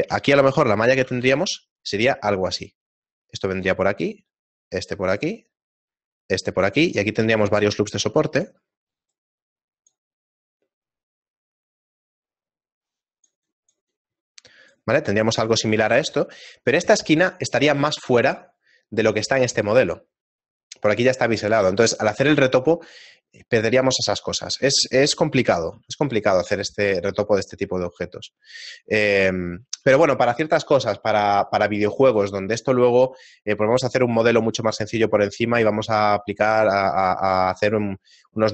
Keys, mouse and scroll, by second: 1.7 a, 26.8 middle click, 27.6 shift+middle click, 28.1-28.8 scroll down 2, 28.8 middle click, 29.1 shift+middle click, 29.8 a, 31.6 a.